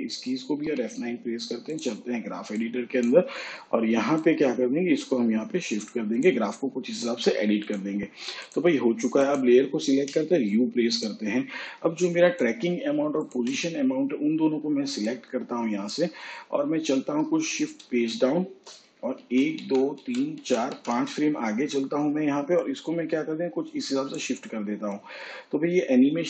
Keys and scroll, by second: 2.4 F9, 11.8 u, 19.4 shift+Page_Down, 21.0 ctrl+Right.